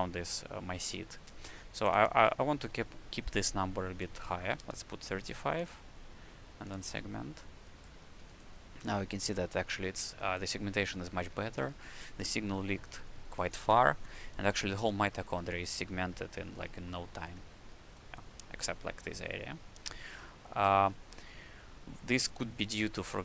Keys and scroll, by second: 4.5 KP_3, 5.6 KP_5, 7.9 q, 9.3 q.